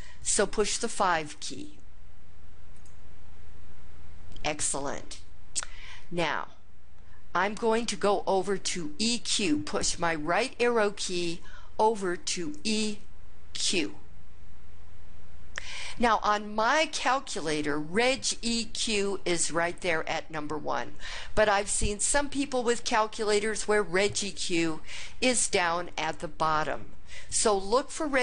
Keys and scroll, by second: 2.8 5, 12.6 Right, 13.6 Right.